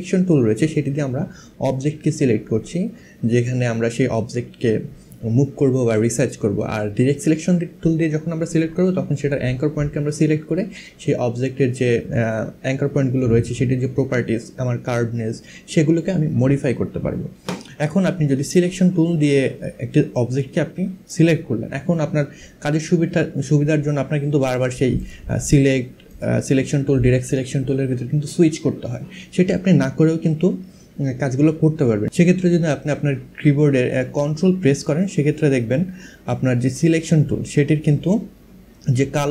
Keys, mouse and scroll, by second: 18.0 click, 19.8 click, 24.6 click, 25.7 click.